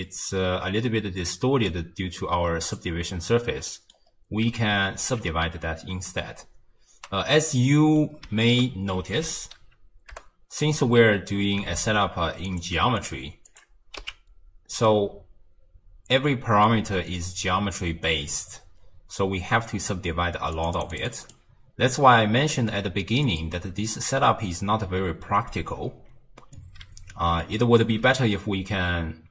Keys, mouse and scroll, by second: 1.7 click, 3.7 middle click, 4.1-5.0 scroll down 1, 5.0 ctrl+x, 5.4-6.7 middle drag, 6.7-7.7 scroll down 1, 7.7 middle click, 8.4 ctrl+a, 13.5 click, 14.0 x, 14.8-17.9 middle drag, 18.0-18.5 scroll up 3, 18.5-20.5 scroll down 4, 20.5-26.1 drag, 26.1-26.6 scroll up 1, 26.6-29.3 middle drag.